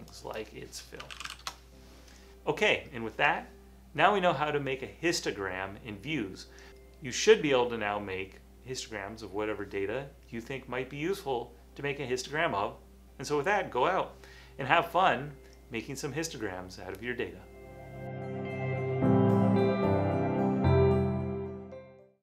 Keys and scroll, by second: 0.9-1.9 typing.